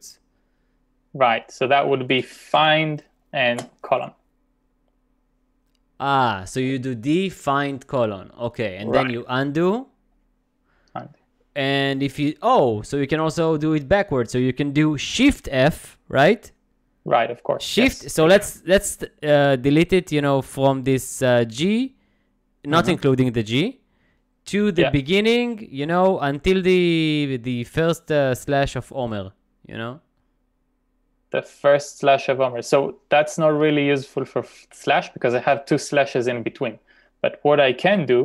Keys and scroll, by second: 2.6 f, 3.5 shift+;, 10.1 u.